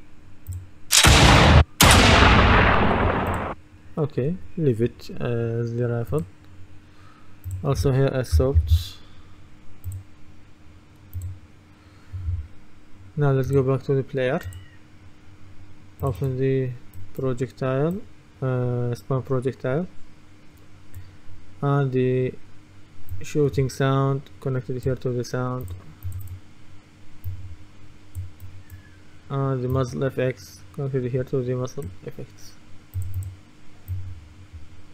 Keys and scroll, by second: 8.1-9.3 typing.